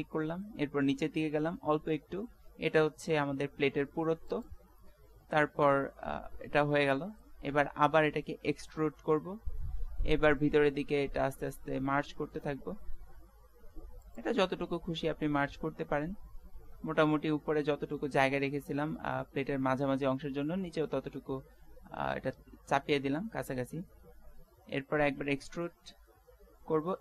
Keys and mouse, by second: 5.0-7.2 middle drag, 9.2 e, 14.5-16.3 middle drag, 17.4-19.6 middle drag, 17.4 z, 18.9 z, 23.9-25.8 middle drag, 25.1 e.